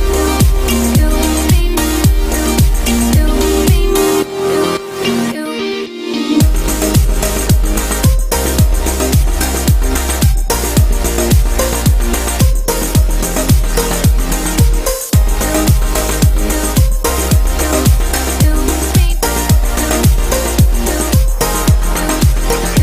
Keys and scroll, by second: 10.6 ctrl+i.